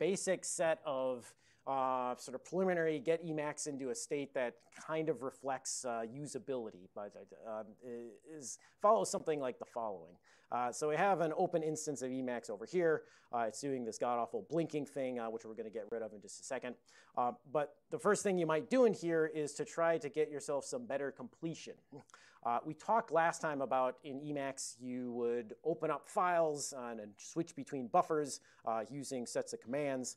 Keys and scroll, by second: 13.8 super+Right, 15.5 super+Left.